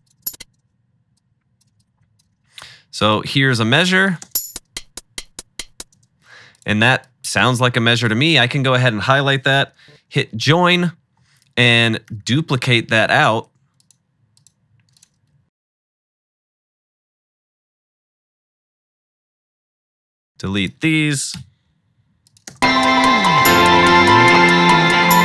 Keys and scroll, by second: 0.5 space, 2.2 super+d, 2.3 super+d, 4.3 space, 6.0 space, 9.8 super+j, 11.8 super+d, 12.1 r, 12.2 r, 12.4 r, 13.6 super+z, 15.3 -, 15.5 -, 15.7 super+d, 16.1 super+d, 16.3 super+-, 16.5 super+d, 17.5-19.8 typing, 19.1 super+d, 21.4 BackSpace, 22.5 space.